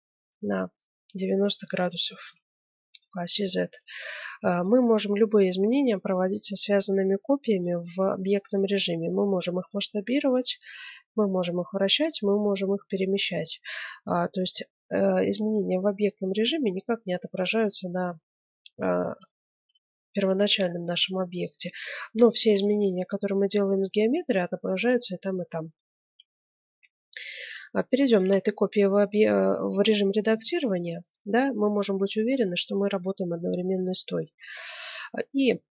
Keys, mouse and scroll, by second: 3.5-6.9 middle drag, 6.9 click, 13.5-17.5 drag, 19.4-22.0 middle drag, 22.9-25.1 middle drag, 25.8 middle click, 26.2-28.1 middle drag, 27.6 Tab, 28.2 middle click, 30.4 ctrl+Tab, 33.2-34.9 middle drag, 33.8 z, 35.5 z.